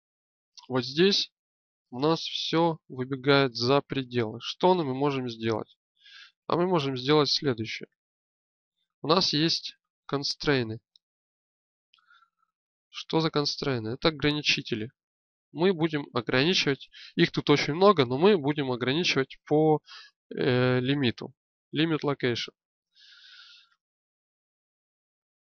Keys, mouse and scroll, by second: 2.3 g, 12.6 n, 15.7-19.4 drag.